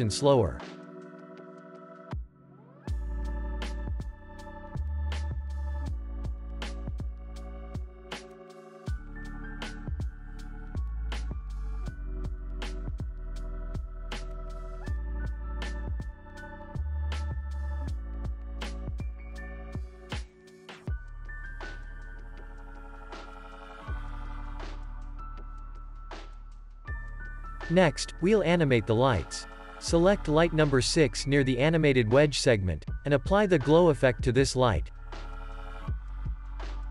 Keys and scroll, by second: 10.9 ctrl+s, 11.8 space, 14.4 space, 14.7 ctrl+s, 15.8 v, 17.0 ctrl+c, 17.9 x, 18.6 ctrl+v, 19.4 x, 20.4 ctrl+s, 21.2 alt+x, 22.6 z, 25.0 ctrl+c, 25.2 ctrl+v, 26.3 Delete, 27.2 ctrl+s, 33.8 ctrl+space, 34.0-36.5 typing, 36.5 Return.